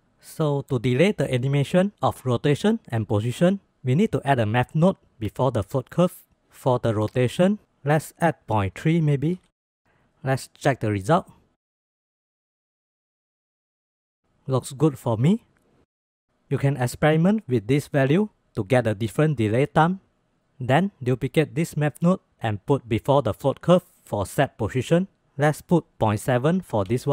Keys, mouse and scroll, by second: 0.3 click, 1.9 shift+a, 8.1-10.1 drag, 10.3-11.4 drag, 11.4 space, 12.5 space, 12.9 click, 13.2 space, 14.5 click, 14.5 space, 14.8 space, 16.1 click, 16.1 space, 21.2-21.5 drag, 21.7 click, 22.5 shift+d, 23.7 click, 25.0 click, 25.5-27.1 drag.